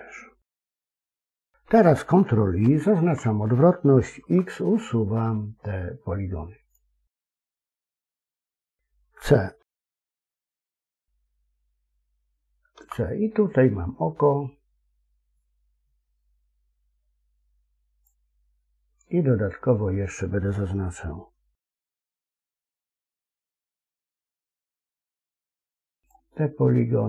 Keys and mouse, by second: 2.5 ctrl+i, 4.1 x, 9.5 x.